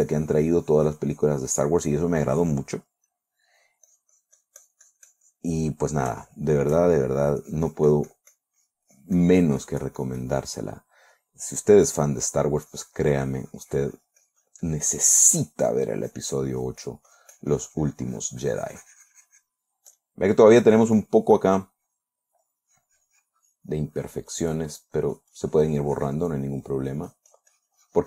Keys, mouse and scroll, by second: 2.4-2.9 middle drag, 3.5-4.0 middle drag, 4.3-6.5 drag, 6.0-6.5 middle drag, 6.7-7.7 shift+middle drag, 7.9-11.1 shift+drag, 11.1 middle click, 12.1 click, 12.7 click, 13.1-16.4 drag, 20.4 click, 21.5 click, 22.3-26.9 drag, 27.1-28.0 drag.